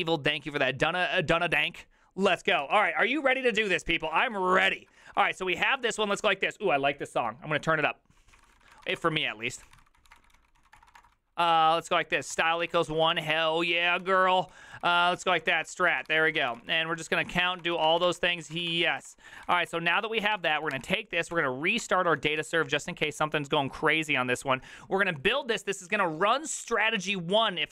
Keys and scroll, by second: 3.9-6.3 typing, 5.0 Left, 8.1-19.5 typing, 19.6 ctrl+a, 20.4 ctrl+c, 20.5 ctrl+c, 20.6 ctrl+c, 20.7 Up, 21.3 Up, 21.8 Return, 22.2 ctrl+a, 22.4 ctrl+a, 22.8 Up, 23.1 Up.